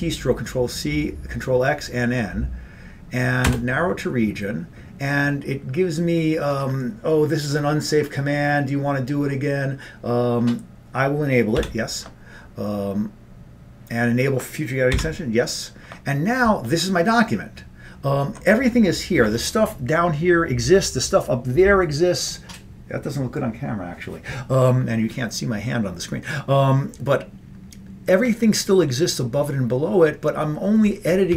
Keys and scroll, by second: 3.5 Return, 11.7 y, 15.1 y.